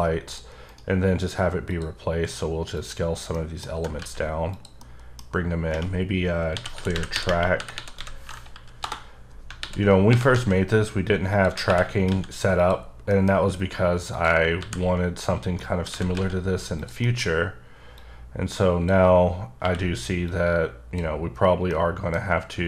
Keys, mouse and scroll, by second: 0.3 click, 0.6 right click, 1.7 click, 2.7 click, 3.0-3.3 scroll down 3, 3.3 middle click, 3.7 g, 4.0 z, 4.5 click, 4.8 middle click, 6.5-8.0 typing, 8.5 Down, 8.8 Return, 9.6 alt+r, 9.9 scroll up 3, 10.1 g, 10.3 z, 11.3 click, 11.4 g, 11.6 y, 12.1 x, 12.5 click, 12.8 scroll down 3, 13.0 scroll up 1, 13.1 middle click, 13.5-14.1 scroll down 2, 14.1 click, 14.6 alt+g, 15.0-15.3 scroll up 6, 15.5 middle click, 15.9 g, 16.1 z, 16.7 click, 17.0 middle click, 17.9 click, 19.6 q, 20.3 click, 21.7 middle click.